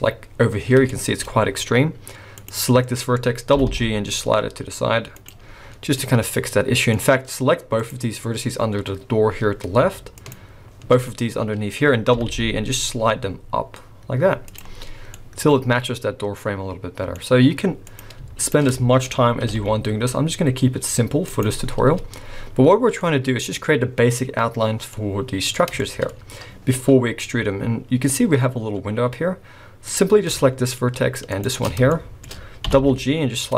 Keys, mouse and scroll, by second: 0.4 scroll up 1, 0.9 shift+middle click, 1.2-1.7 scroll up 2, 2.3 click, 2.7-3.1 scroll down 1, 3.5 g, 5.5 scroll down 3, 6.0 middle click, 7.0-7.5 scroll up 1, 7.8 click, 8.6 scroll down 1, 9.5 scroll up 1, 10.2 shift+click, 12.2 g, 14.7-15.1 scroll down 3, 15.1 middle click, 17.4 scroll up 1, 17.8 click, 18.4 shift+click, 18.7 shift+middle click, 19.0-19.4 scroll up 2, 19.4 g, 21.6-22.1 scroll down 7, 23.0 middle click, 25.0 middle click, 25.8 shift+middle click, 26.1-26.4 scroll up 4, 27.2 scroll up 3, 29.9 click, 30.4 shift+middle click, 31.3 shift+click, 31.9 shift+middle click, 32.6 g.